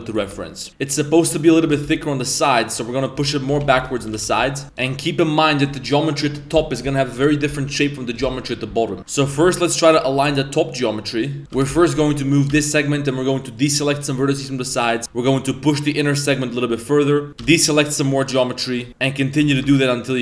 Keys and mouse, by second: 0.2 Tab, 0.7 b, 3.2 z, 3.5 a, 3.8 b, 4.1 g, 4.7 shift+right click, 5.1 middle click, 5.7 z, 6.4 middle click, 7.2 KP_7, 9.0 z, 9.2 g, 10.3 c, 11.4 ctrl+z, 11.4 g, 12.5 c, 15.0 g, 17.4 c, 19.4 z, 19.6 Tab.